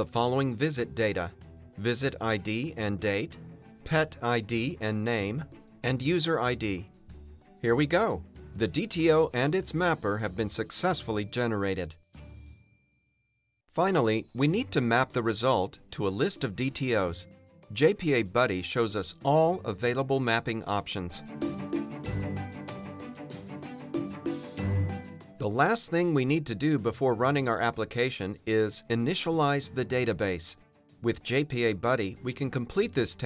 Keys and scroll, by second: 11.6 Return, 13.6 Return.